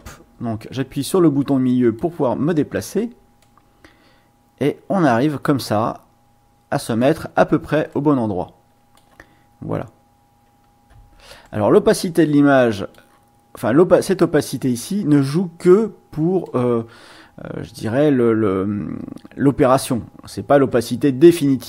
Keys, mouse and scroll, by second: 0.1 click, 1.0-2.2 drag, 3.4-7.2 drag, 7.9 click, 8.4 middle click, 8.4 scroll, 11.4-12.6 drag, 12.6 middle click, 16.4-20.0 drag, 20.7 click, 20.8 middle click, 20.9 click, 21.6 click.